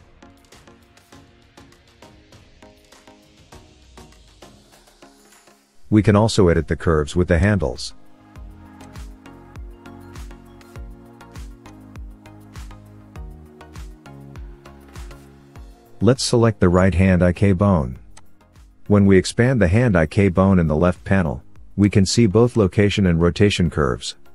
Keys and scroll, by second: 1.2 shift+Left, 2.0 space.